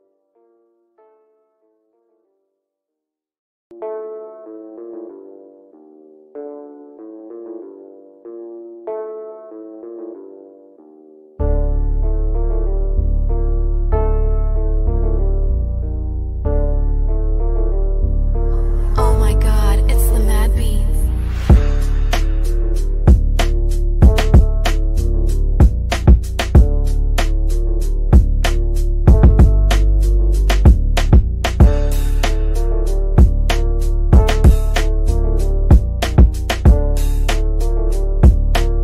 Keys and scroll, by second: 2.1 F3, 2.9 Escape, 4.6 shift+F2, 6.0 F3, 21.1 F3, 21.7 Escape, 34.3 F3, 35.4 Escape.